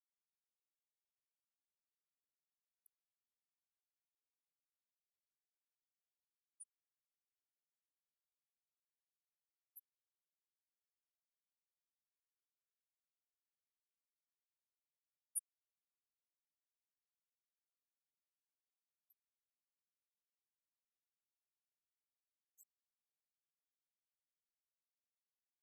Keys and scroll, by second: 3.5 ctrl+Right, 8.2 ctrl+Left, 8.8 ctrl+Right, 9.9 ctrl+Up, 10.7 ctrl+Right, 12.1 ctrl+Down.